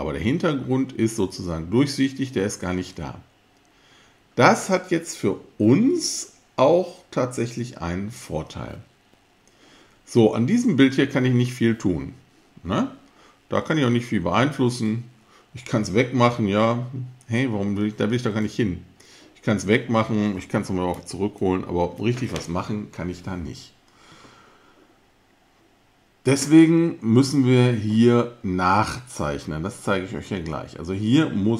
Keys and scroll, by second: 21.4 super+z.